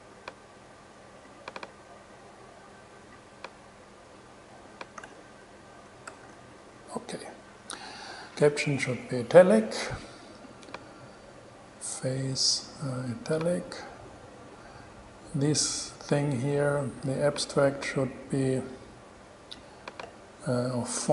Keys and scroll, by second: 5.2 9, 6.1 shift+super+0, 6.3 shift+super+e.